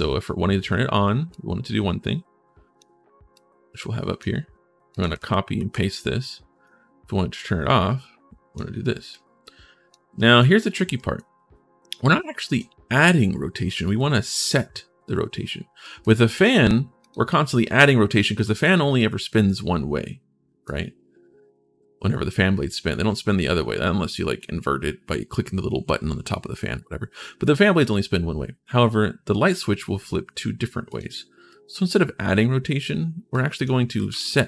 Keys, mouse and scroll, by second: 1.1-2.5 drag, 1.1-2.2 right drag, 3.1 click, 4.7 click, 5.0 ctrl+c, 5.7 click, 7.1-8.3 drag, 8.9 click, 9.9 right click, 10.7 right click, 15.6 right click, 16.1 right click, 16.8 click, 17.4-20.4 right drag, 18.2 s, 30.7 right click, 31.3 right click, 33.1 click, 33.5-34.4 typing.